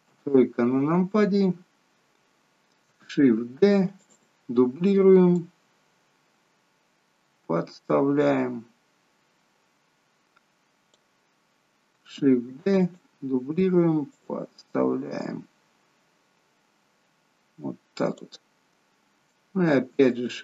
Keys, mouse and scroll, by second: 0.1 KP_3, 1.4 scroll up 3, 3.7 shift+d, 5.5 click, 12.5 shift+d, 14.2 click, 19.8 shift+d.